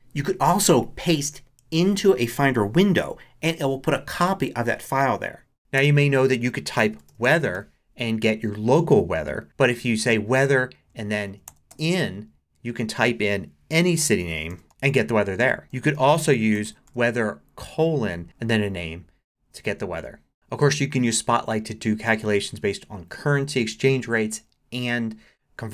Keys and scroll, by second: 6.6-8.1 typing, 10.9-12.0 typing, 14.2 p, 14.5 h, 15.6 super+a, 15.7-18.2 typing.